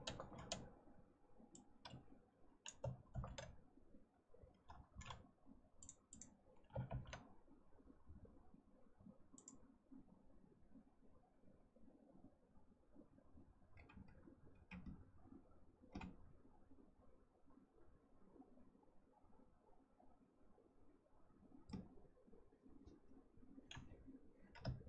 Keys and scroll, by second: 3.0 ctrl+c, 6.8 ctrl+v.